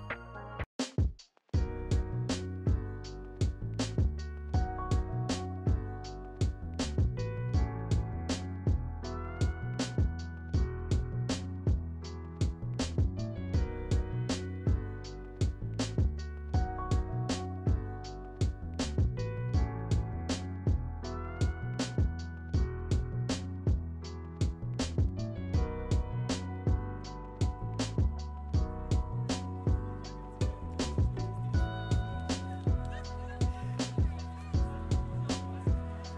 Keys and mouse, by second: 0.5 middle click, 1.9 click, 2.7 click, 3.3-4.2 middle drag, 4.8 click, 9.7 click, 13.3 click, 19.5 Tab, 19.9 middle click, 21.1-22.2 middle drag, 23.1 click, 24.1 click, 26.2-28.2 drag, 29.1 middle click, 30.3 click, 31.0 click, 32.6 click, 33.3 click, 33.9 middle click, 34.8 Tab, 35.1 click, 35.9-36.1 middle drag.